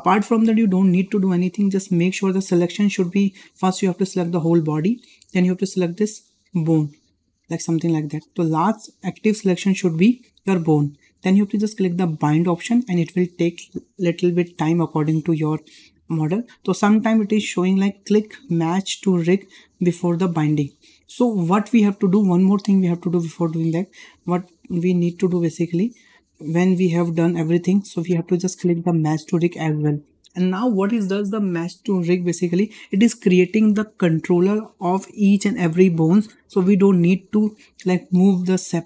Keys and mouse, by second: 3.8-4.4 drag, 6.4 shift+click, 15.0-20.2 drag, 24.0 click, 25.3 shift+middle drag, 25.9 click.